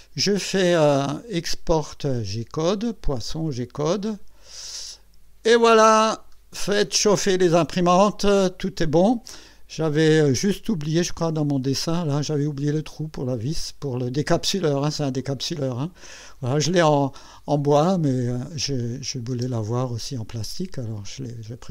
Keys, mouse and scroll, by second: 2.1 click, 4.5 click, 6.4 scroll up 1, 11.0 click, 11.6-12.7 drag, 13.8 click, 15.2-16.8 drag, 18.0 click, 19.0 click, 19.3 space, 19.8-21.7 drag.